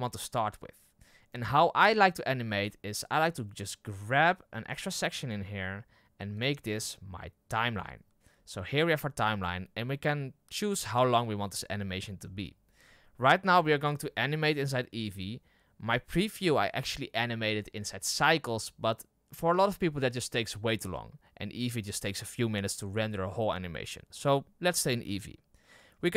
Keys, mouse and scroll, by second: 5.2-26.1 drag.